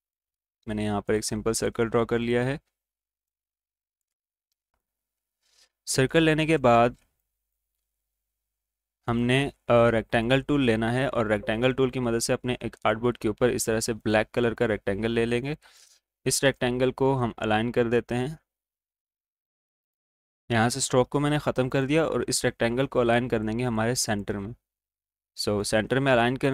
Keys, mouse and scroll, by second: 6.6 click, 6.9 alt+scroll up 1, 7.0 click, 7.7 space, 9.3 right click, 10.2-13.8 drag, 18.9 click, 20.7-26.5 drag.